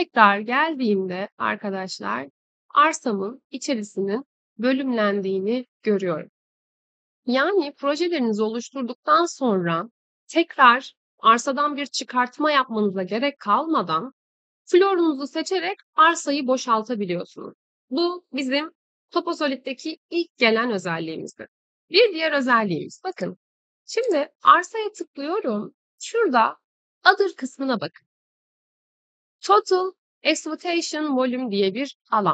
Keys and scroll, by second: 2.9 Escape.